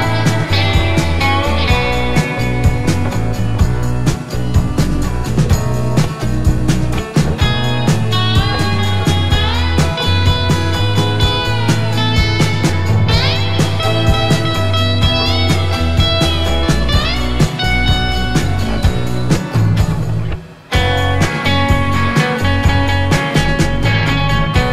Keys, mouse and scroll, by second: 0.0 Down, 1.9 Left, 2.2 Down, 2.4 Right, 2.7 Down, 5.3 click, 5.5 Up, 7.1 click, 7.4 Up, 8.0 Right, 8.9 click, 9.0 Up, 15.9-16.3 scroll down 1, 16.3-18.3 scroll up 1, 19.2 click, 19.7 click, 20.3 click, 22.1 click, 24.0 click.